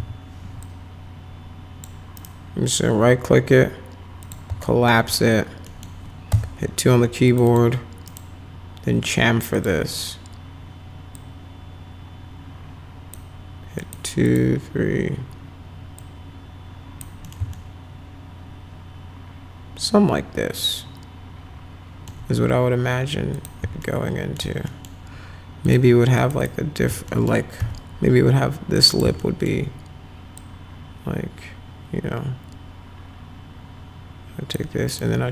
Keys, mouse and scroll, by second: 0.0 r, 0.6-1.9 drag, 2.2 right click, 4.2 click, 4.6 alt+middle click, 5.7 right click, 6.3 2, 7.3 click, 7.5 click, 8.1 scroll down 2, 9.5 click, 11.2-13.2 drag, 13.8 click, 14.3 click, 16.0-17.0 drag, 17.2 middle click, 17.6-22.1 alt+middle drag, 23.3 click, 23.8 alt+middle click, 24.7 middle click, 25.7 click, 26.2 click, 26.4 click, 27.1 middle click, 27.6 F4, 28.8 click, 29.0 click, 29.2 alt+middle click, 30.4-34.5 drag, 34.9 right click.